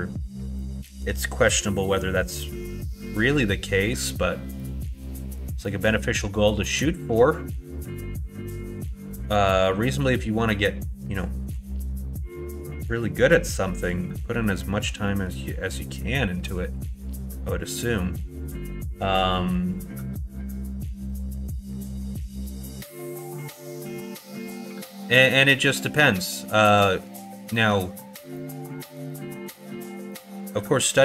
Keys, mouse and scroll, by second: 0.7-1.8 middle drag, 2.1 middle click, 3.9 middle click, 4.5 middle click, 5.6 middle click, 6.3 shift+middle click, 7.8 shift+d, 11.5 e, 14.2 middle click, 14.7 middle click, 15.1 middle click, 16.4 middle click, 21.1 middle click, 21.8 shift+middle click, 22.3 middle click, 25.0 middle click, 26.1 middle click, 27.6 middle click, 28.9 shift+middle click, 30.1 middle click.